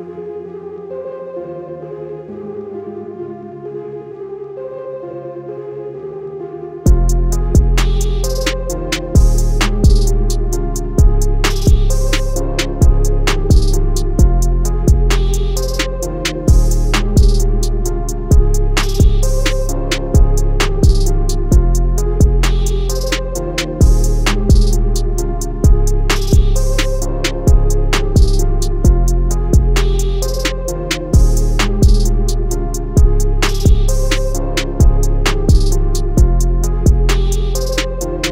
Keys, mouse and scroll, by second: 2.7-3.5 alt+scroll up 2, 3.5 click, 4.8 scroll down 1, 5.4 scroll up 1, 5.7 scroll down 1, 6.5 click, 6.7 scroll up 1, 7.1 click, 7.9 click, 9.4-9.9 alt+scroll down 2, 10.5 click, 14.0 click, 19.3 shift+click, 20.3 click, 24.2-24.5 alt+scroll up 2, 25.0 click, 25.3 scroll down 1, 25.5 scroll up 1, 26.1 click, 26.3 scroll down 1, 26.5 scroll up 1, 27.1 click, 27.7 scroll up 1, 28.0 click, 28.1 scroll down 1, 28.7 alt+scroll up 2, 29.4 click, 30.1 alt+click, 30.7 alt+click, 31.0 alt+click, 31.3 scroll down 1, 32.0 click, 32.2 scroll down 1, 33.4 scroll down 1, 34.4 click, 35.0 scroll up 1, 35.2 scroll down 1, 35.8 click, 36.4 BackSpace, 36.7 click, 36.7 BackSpace, 37.4 click.